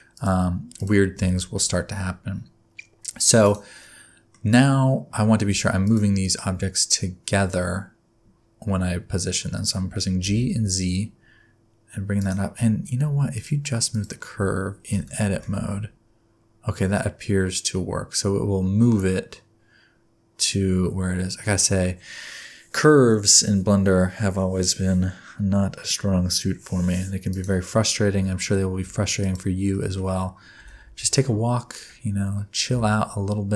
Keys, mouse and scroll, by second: 0.1 click, 0.8 click, 1.1 g, 3.8 middle click, 5.8 shift+click, 10.2 g, 12.6 Tab, 13.0 Tab, 13.3 click, 13.9 click, 14.4 Tab, 14.9 a, 15.3 g, 28.1 Tab, 29.2 shift+click, 29.7 shift+middle click, 30.6 g.